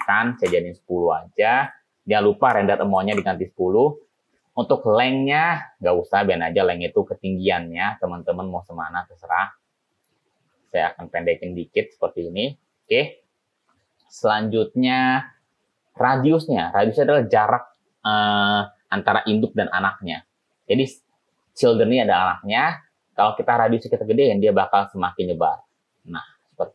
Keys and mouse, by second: 2.0-3.9 drag, 6.3 click, 6.9 click, 8.2-9.5 drag, 10.3 click, 11.0-13.1 drag, 24.1-25.5 drag.